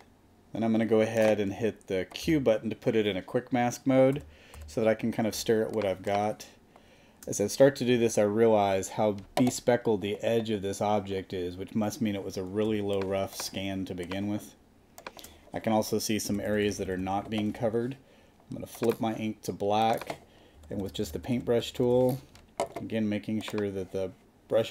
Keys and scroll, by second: 2.2 alt+q, 4.1 super+=, 5.3 super+space, 12.7 space, 16.2 [, 20.5 [.